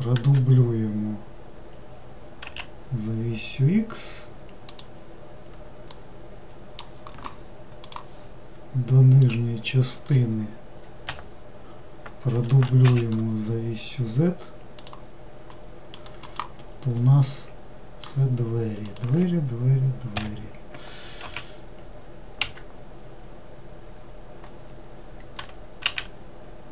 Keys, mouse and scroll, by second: 0.2 shift+d, 5.9-8.9 middle drag, 9.2 click, 11.1 l, 12.5 shift+d, 15.5-16.2 middle drag, 16.2 click, 17.0-18.8 middle drag, 18.8 click, 21.2 z, 25.4 g.